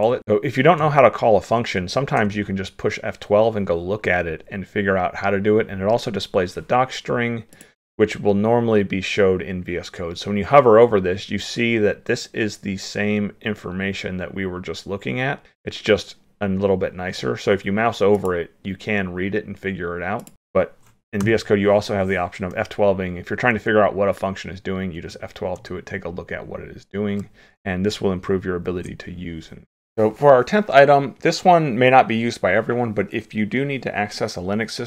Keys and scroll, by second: 28.7 ctrl+w.